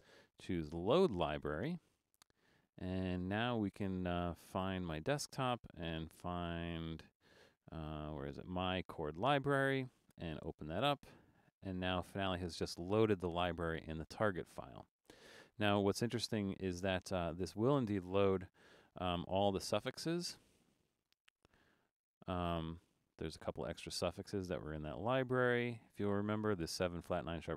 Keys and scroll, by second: 18.8 shift+d, 21.1 Return.